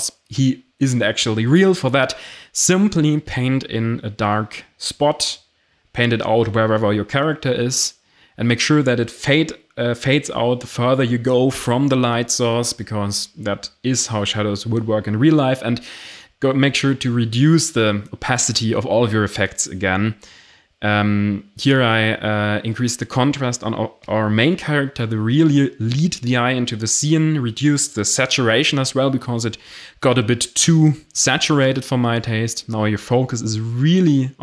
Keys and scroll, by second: 2.2 Return, 6.2 x, 9.3 x, 16.0 Delete.